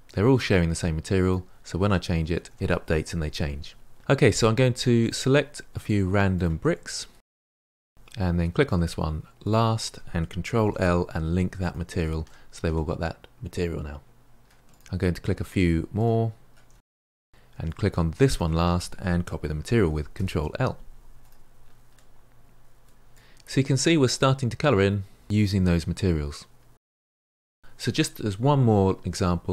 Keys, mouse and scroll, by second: 2.3 ctrl+z, 3.9-5.0 middle drag, 5.0 click, 5.4 shift+click, 5.5-5.9 middle drag, 5.9 shift+click, 6.1-6.6 middle drag, 6.6 shift+click, 6.8 shift+click, 7.0 shift+click, 7.3 shift+click, 7.5 shift+click, 7.6-9.4 middle drag, 9.4 shift+click, 11.6 ctrl+l, 12.2-14.6 middle drag, 14.6 click, 14.8 shift+click, 15.0 shift+click, 15.2-15.7 middle drag, 15.7 shift+click, 15.9 shift+click, 16.1 shift+click, 16.2-16.5 middle drag, 16.5 shift+click, 16.7 shift+click, 17.1 shift+click, 17.2-18.3 middle drag, 18.3 shift+click, 21.2 ctrl+l, 21.8-23.1 middle drag, 23.1 click, 23.5-25.7 middle drag, 25.7-28.1 scroll down 1, 28.1 click.